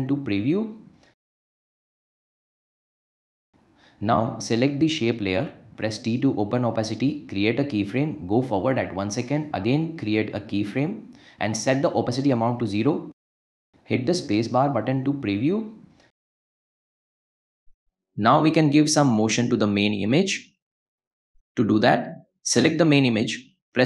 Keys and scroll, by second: 1.3 space, 3.4 space, 6.0 t, 11.4 o, 11.6 Return, 13.4 space, 23.4 p.